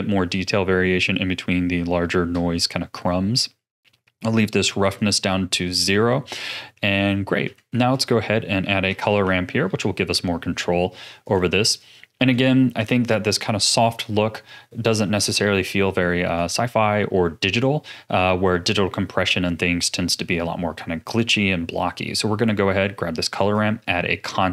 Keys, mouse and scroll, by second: 4.0-6.4 drag, 6.4-6.7 scroll down 1, 6.7 middle click, 7.3-7.7 scroll down 1, 7.7 shift+a, 11.8 click, 13.9-14.5 scroll up 3, 14.5-15.5 middle drag, 15.5-16.0 scroll up 5, 16.3-19.4 drag, 24.4-24.5 drag.